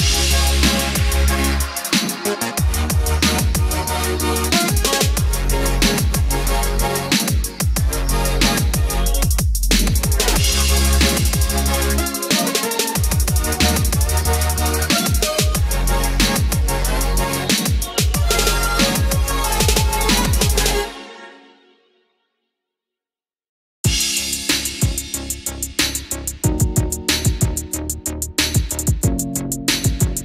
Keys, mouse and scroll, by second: 0.4 click, 2.8-4.3 middle drag, 4.5 click, 8.3 middle click, 11.3 click, 16.1-17.5 middle drag, 19.3 click, 27.1 middle click, 28.0 click.